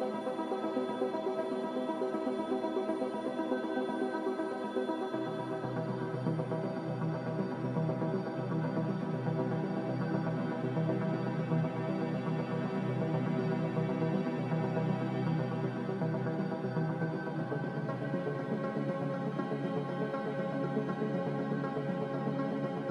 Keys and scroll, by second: 2.0 z, 6.0 x, 7.8 z, 18.8 z, 20.3 typing, 21.2 Return.